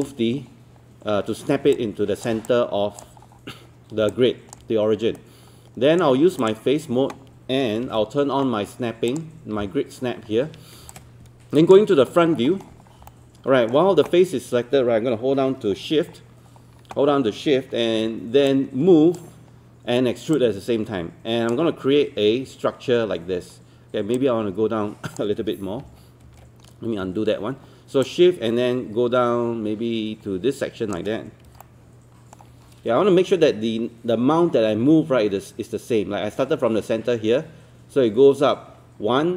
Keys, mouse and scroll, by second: 0.0-0.9 typing, 1.8 click, 2.5 alt+click, 3.2 scroll up 1, 4.1 alt+click, 5.2 right click, 6.4 click, 7.8 ctrl+space, 9.1 click, 12.2 scroll up 1, 13.1 alt+middle click, 15.8-16.1 scroll down 1, 16.2 scroll up 1, 18.5 shift+click, 20.4-21.5 shift+drag, 24.2 shift+click, 25.8 ctrl+z, 26.3 ctrl+z, 28.0-31.0 shift+drag, 31.6 alt+middle click.